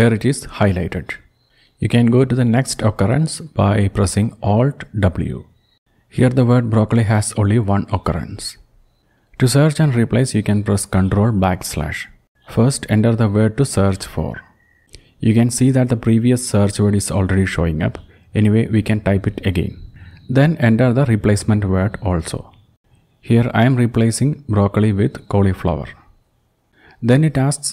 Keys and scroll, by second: 5.5 alt+w, 7.8 alt+w, 8.8 alt+w, 9.7 ctrl+\, 12.9 typing, 16.0-18.3 typing, 18.4 Return, 22.2-25.5 typing, 25.7 Return.